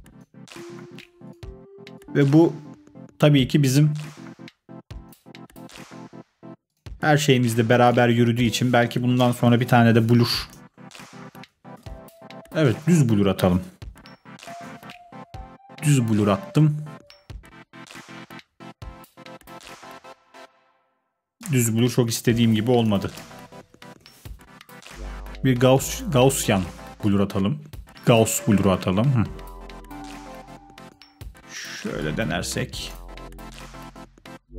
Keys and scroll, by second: 9.1-14.2 typing, 14.6 Return, 21.9 BackSpace, 23.1-24.5 typing.